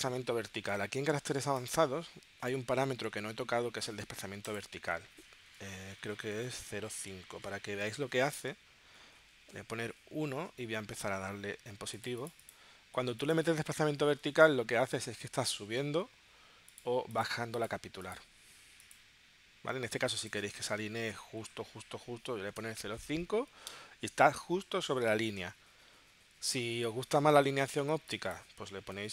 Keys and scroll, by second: 9.3 1, 9.9 Tab, 20.9 0, 22.5 Tab, 29.0 0.